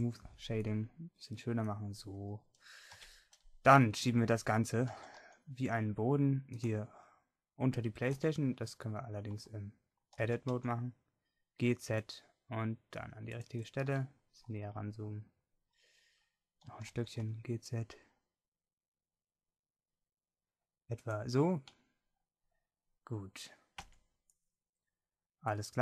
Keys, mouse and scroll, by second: 0.9-2.9 drag, 2.9 KP_1, 3.9-6.4 middle drag, 4.9 g, 8.3 Tab, 9.4 a, 10.2 g, 16.7 g, 21.8-23.8 drag, 23.8 Tab.